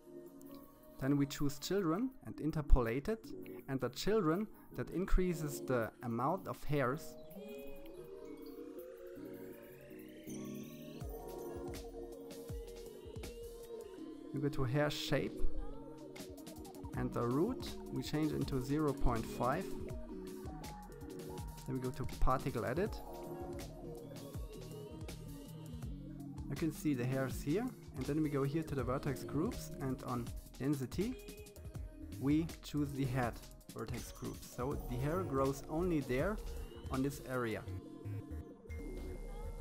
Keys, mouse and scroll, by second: 0.0-1.6 drag, 2.3-4.1 scroll down 2, 10.5-11.6 scroll down 4, 11.6-12.6 scroll down 3, 12.6-13.7 drag, 13.7-15.4 scroll down 3, 16.2-17.7 drag, 20.2-22.0 drag, 26.2-27.7 scroll down 9, 27.7 click, 28.6-29.3 scroll down 2, 29.3-31.4 drag, 34.7-36.3 middle drag, 38.4-39.6 middle drag.